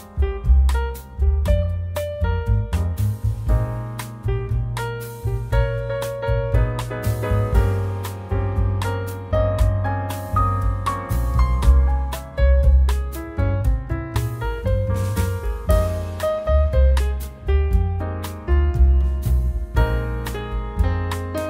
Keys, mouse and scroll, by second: 0.1 shift+middle click, 0.7 middle click, 1.1 scroll up 2, 2.3 click, 2.6 click, 3.4 scroll down 3, 3.5 middle click, 5.4 middle click, 6.2 click, 7.3 click, 8.7 click, 9.3 click, 9.7 scroll down 2, 9.8 middle click, 10.2 click, 11.1 middle click, 11.8 middle click, 12.5 click, 13.4 click, 13.6 scroll down 1, 13.7 middle click, 14.4 scroll down 2, 14.8 click, 15.4 middle click, 18.2 click, 18.7-19.5 scroll down 6, 19.0 middle click, 19.8 shift+middle click, 20.2 scroll up 1, 20.4 middle click.